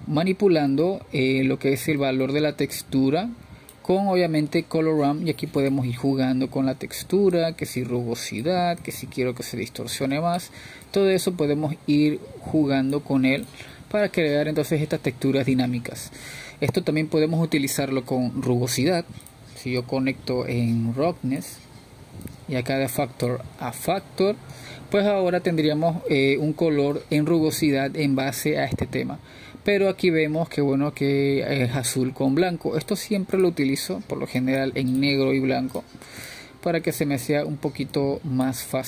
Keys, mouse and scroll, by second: 4.5-4.9 scroll up 2, 5.3 middle click, 6.1-17.0 drag, 17.0-20.0 middle drag, 20.0-21.4 drag, 21.4 shift+d, 24.8 click, 25.5 click, 29.1-32.5 middle drag, 33.1-36.2 middle drag, 36.2-37.8 drag, 38.2-38.8 drag.